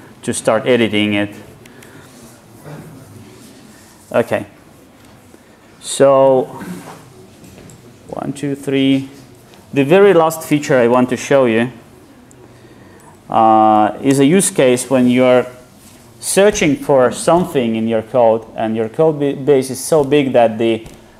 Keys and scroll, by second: 5.7 super+w, 10.8 alt+F2.